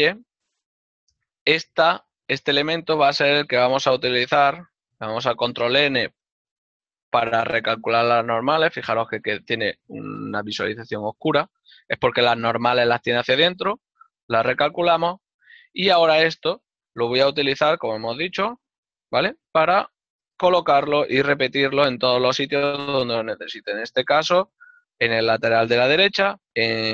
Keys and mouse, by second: 3.2 l, 4.2 ctrl+n, 5.0 ctrl+middle click, 8.0 ctrl+z, 8.4 middle click, 10.0 middle click, 13.3 ctrl+n, 13.9 middle click, 17.2 click, 20.0 ctrl+KP_Subtract, 21.0 ctrl+KP_Subtract, 26.1 alt+click.